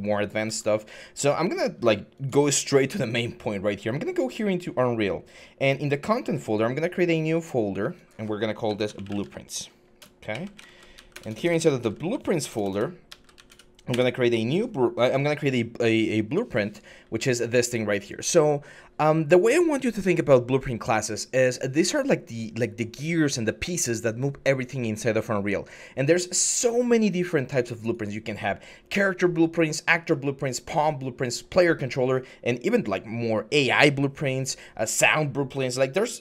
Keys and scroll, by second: 0.2 alt+Tab, 2.0 alt+Tab, 8.5-13.6 typing, 13.7 Return.